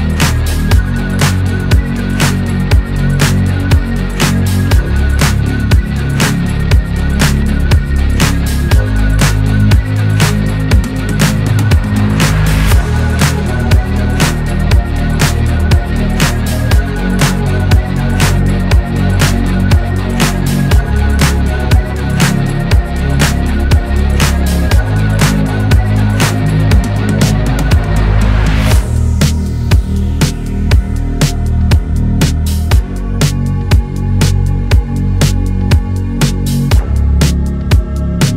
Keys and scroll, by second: 0.0 ctrl+d, 3.8 Left, 3.8 Left, 4.5 Left, 4.5 Up, 4.6 Up, 4.7 Up, 4.7 Right, 4.8 Right, 5.5 ctrl+d, 7.9 Up, 8.0 Up, 9.1 Left, 15.9 Delete, 19.0 Down, 19.0 Down, 19.2 Right, 19.3 Left, 21.4 Left, 21.7 Right, 21.7 Left, 21.8 Down, 21.9 Down, 22.0 Right, 22.1 Up, 22.3 Right, 24.4 Up, 24.6 Right, 24.7 Right, 32.9 ctrl+d.